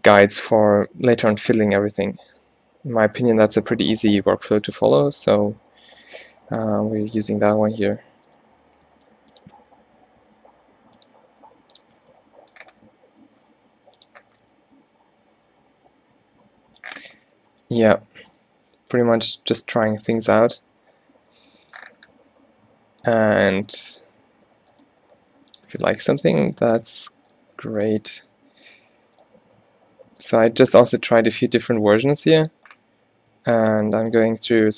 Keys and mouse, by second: 8.9 g, 9.6 e, 11.2 e, 12.0-14.0 drag, 13.3 e, 16.4 middle click, 18.4 ctrl+z, 18.7 ctrl+z, 19.5 g, 23.8 click, 24.5 f, 24.9 g, 25.6 click, 25.8 click, 27.2 Tab, 27.9 Tab, 28.2 g, 28.5 Tab, 29.7 Tab, 30.1 Tab, 30.8 Tab, 31.7 g, 32.2 e, 33.3 e, 34.4 e.